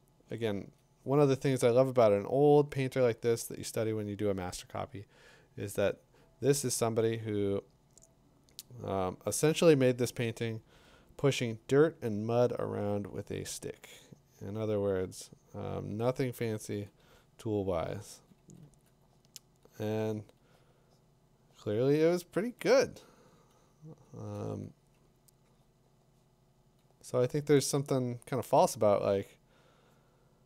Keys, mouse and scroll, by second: 11.3-14.3 drag, 16.4 click, 17.9 click, 18.4 click, 18.6 click, 20.1 click, 20.4 click, 22.3 ], 22.6 ], 23.9 [, 24.1 [, 24.4 [.